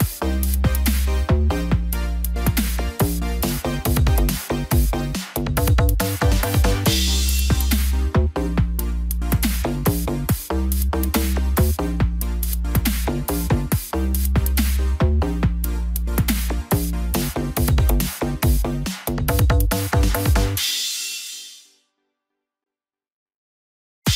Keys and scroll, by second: 4.5 ctrl+j, 11.9 ctrl+=, 23.6 ctrl+=.